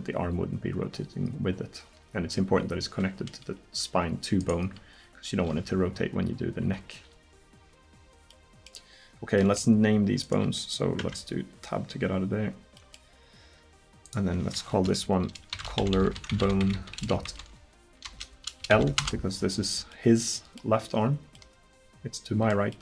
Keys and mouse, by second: 4.4-6.7 drag, 4.7 r, 7.9 click, 11.0 Tab, 14.1 middle click, 16.0 l, 20.0 middle click, 22.0-22.8 middle drag.